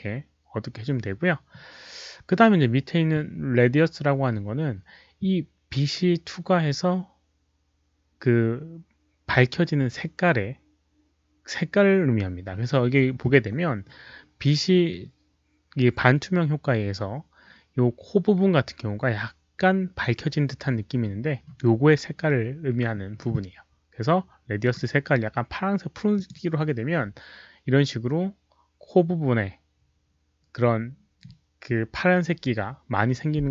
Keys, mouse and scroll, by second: 0.0 click, 24.6 click, 26.1 click, 32.0 click.